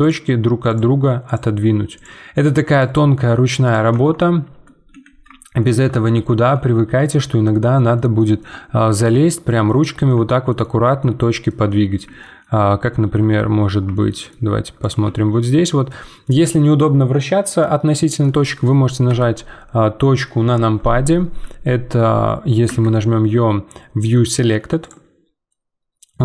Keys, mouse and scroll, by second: 0.0 click, 0.2 g, 1.2 click, 1.4 g, 2.7 click, 3.0 g, 3.9 Tab, 4.2 middle click, 4.9 z, 5.3 shift+scroll down 2, 5.6 shift+middle click, 6.0 scroll down 2, 6.3 Tab, 6.6-6.9 scroll down 1, 6.9-12.6 middle drag, 12.6 scroll up 4, 12.9-14.8 shift+middle drag, 14.8 click, 15.1-19.1 shift+middle drag, 19.1 KP_Decimal, 21.2-22.6 scroll down 10, 22.6 `, 25.5-26.2 middle drag.